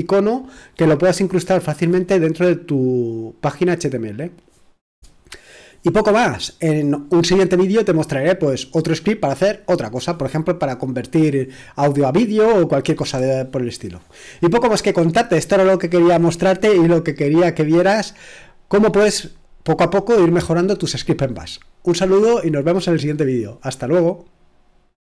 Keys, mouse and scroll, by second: 24.9 click.